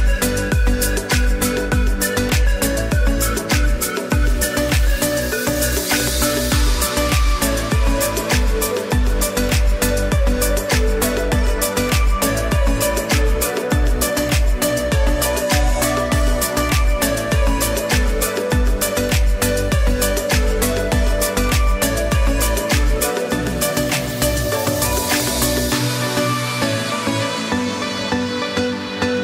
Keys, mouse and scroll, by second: 10.6 click, 10.9 space, 11.1 click, 11.4 space, 11.8 click, 12.2 space, 12.3 click, 13.6 space, 13.7 click, 20.8 click, 23.4 click, 27.8 space, 28.0 click, 28.4 space, 28.7 click.